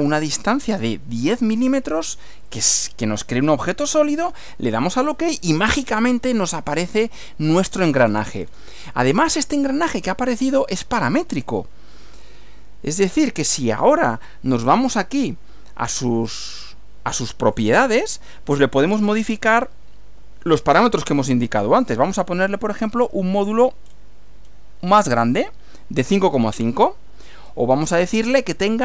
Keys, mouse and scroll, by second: 0.6-1.5 typing, 2.5 click, 4.0 click, 6.8 scroll down 2, 7.6 scroll up 1, 8.1 scroll down 2, 8.5 scroll up 2, 8.6 scroll down 2, 9.0-11.6 middle drag, 12.9 click, 13.9 click, 16.4-17.7 drag, 19.4 click, 22.9-23.5 scroll up 4, 23.8 scroll up 1, 24.4 scroll down 2, 25.3 click, 26.5-27.1 scroll down 3, 27.3 scroll up 1.